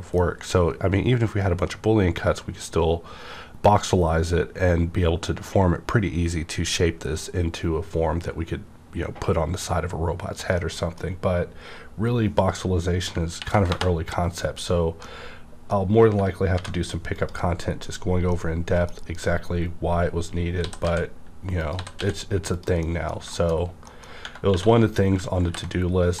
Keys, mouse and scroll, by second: 10.5-13.3 middle drag, 10.9 scroll down 1, 13.4 ctrl+n, 13.6 ctrl+Return, 15.0-17.1 middle drag, 16.5 v, 17.1 click, 17.7-18.1 scroll down 1, 18.2 middle click, 18.3-20.6 middle drag, 18.3 scroll down 1, 18.9-20.6 scroll down 1, 20.6-22.0 typing, 21.6 click, 22.5 click, 22.8 middle click, 23.3 shift+middle click, 24.1 scroll up 1, 24.2 Tab, 24.5 2, 24.9 click, 25.4 ctrl+b, 25.8-26.2 scroll up 1.